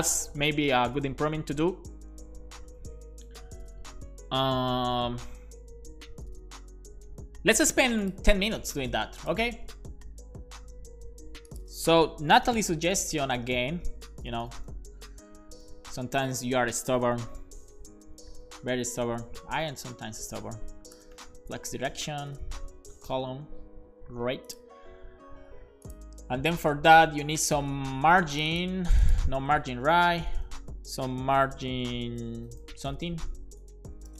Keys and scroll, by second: 12.1-15.8 typing, 20.9-21.8 typing, 22.1 Down, 22.3 Return, 23.1 Return, 23.3 super+s, 29.8 alt+shift+Left, 30.5-34.1 typing.